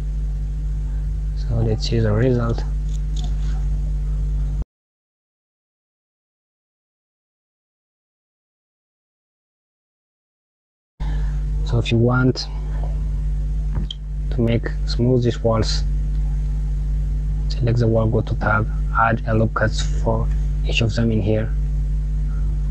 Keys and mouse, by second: 1.4 click, 1.9 KP_Subtract, 3.8 click, 6.4 click, 12.5 click, 16.0 click, 17.6 Tab, 19.5 ctrl+r.